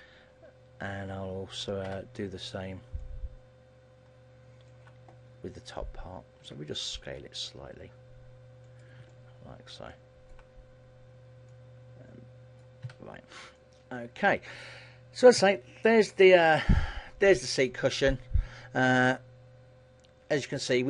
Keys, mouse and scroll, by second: 2.0 b, 6.5 s, 8.9 click, 9.2 middle click, 11.6 click, 13.0 a, 13.3-13.7 scroll down 4, 13.7 middle click, 14.4 Tab, 14.7 middle click, 15.5 a, 15.9-16.2 scroll down 3, 16.2 middle click.